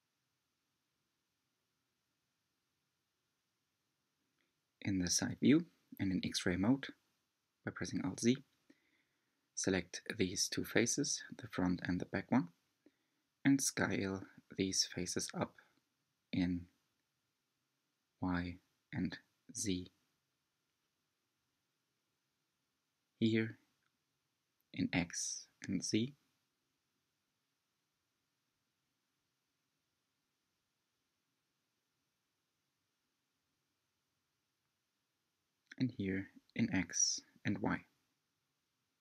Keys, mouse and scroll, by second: 0.5-2.9 middle drag, 2.9 alt+z, 4.3 click, 4.9-5.3 scroll up 3, 6.7 3, 7.1-9.6 drag, 9.6-10.3 scroll up 2, 11.8 s, 17.0 s, 22.7 click, 24.3 click, 26.4 s, 29.3 s, 34.2 click, 35.8-37.6 drag, 37.6 s.